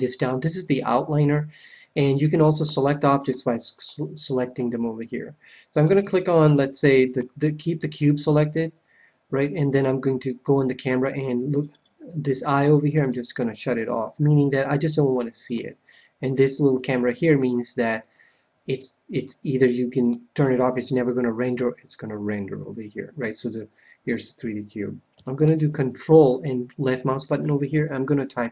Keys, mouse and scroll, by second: 2.4-5.2 drag, 5.6-8.5 drag, 12.9-14.6 drag, 15.4-17.1 drag, 20.0-23.1 drag, 25.3-27.0 drag.